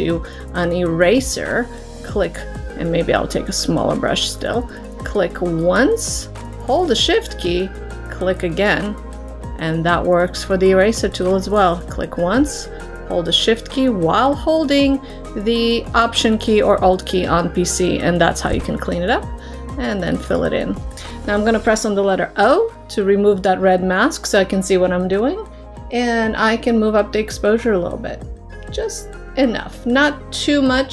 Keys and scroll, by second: 22.5 o.